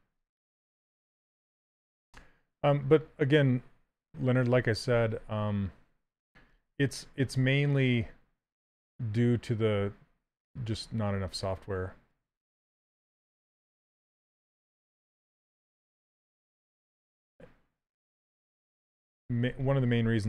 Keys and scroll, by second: 6.8 s, 18.6 s, 19.7 s.